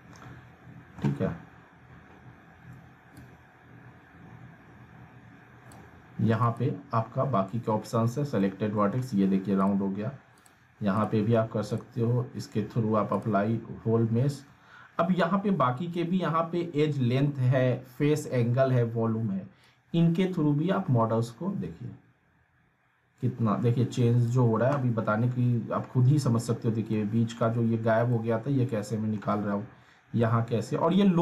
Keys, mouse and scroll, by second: 3.2-5.9 drag, 8.0 scroll down 1, 8.4-9.0 alt+middle click, 9.6 click, 19.6-24.3 drag, 26.1 scroll up 1, 26.9-27.5 alt+middle drag, 30.3-31.1 alt+middle click, 31.1 scroll down 1.